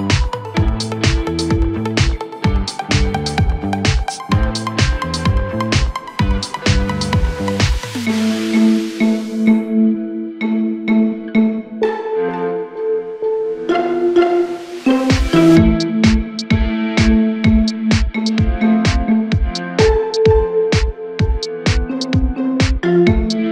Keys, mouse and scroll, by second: 0.0-0.4 scroll down 1, 0.4 s, 3.1 scroll up 2, 3.3 Tab, 5.2 ctrl+r, 9.1-11.5 drag, 11.5-12.4 scroll up 6, 12.4 click, 12.9-13.2 scroll down 2, 13.2 Tab, 15.7-16.7 drag, 17.2-20.3 drag, 21.3-22.2 drag, 22.2-22.6 scroll up 2, 22.6 Tab, 23.0-23.5 scroll down 1.